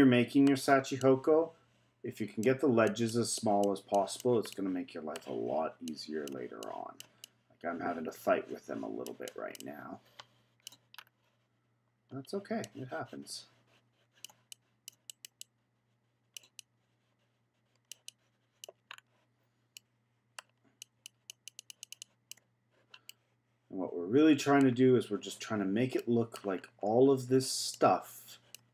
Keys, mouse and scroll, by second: 1.0-4.5 drag, 4.5-5.8 middle drag, 5.8-11.0 drag, 11.0-11.9 scroll down 3, 11.9-12.6 scroll up 2, 12.6-18.9 drag, 18.9-19.7 scroll down 3, 19.7-20.8 middle drag, 20.8-23.1 drag, 23.1-26.6 middle drag, 26.6-27.7 scroll up 6, 27.7-28.7 drag.